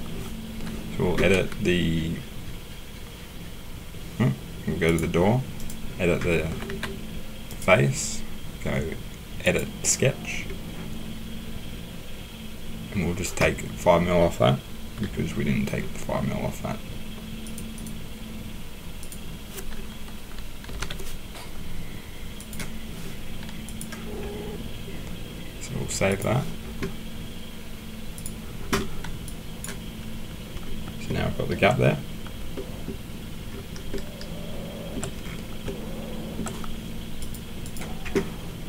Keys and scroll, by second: 6.7 Escape, 20.7 BackSpace, 20.8 1.